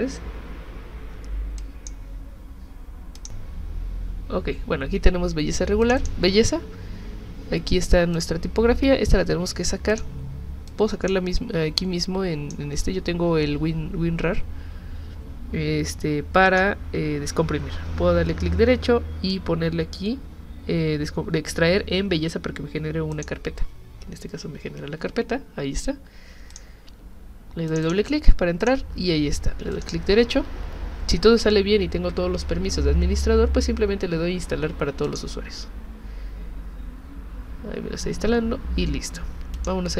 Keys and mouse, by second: 1.6 click, 3.2 click, 5.8 click, 6.0 click, 8.1 click, 9.9 click, 10.7 click, 11.8 click, 16.5 right click, 23.1 click, 26.5 click, 27.7 click, 27.8 click, 28.6 click, 29.7 right click, 35.0 click, 39.5 click.